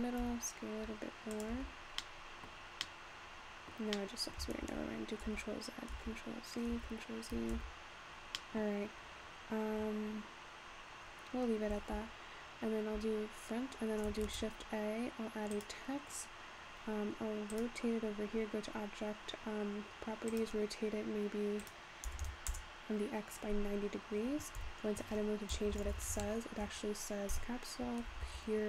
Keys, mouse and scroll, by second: 0.6 s, 2.4 middle click, 2.6-3.0 scroll down 4, 3.0-6.1 middle drag, 6.1 ctrl+z, 6.4 ctrl+z, 7.0 ctrl+z, 7.6 Tab, 8.4 middle click, 8.8-9.4 scroll up 1, 9.4-10.8 scroll up 1, 11.8-12.1 scroll up 4, 12.1 `, 13.7-14.3 scroll down 6, 14.3 shift+a, 16.4-16.8 scroll down 2, 17.9 click, 20.3-23.4 drag, 23.4-24.6 scroll up 5, 24.6 Tab, 25.5 BackSpace, 25.7-26.1 BackSpace, 28.1-28.6 typing.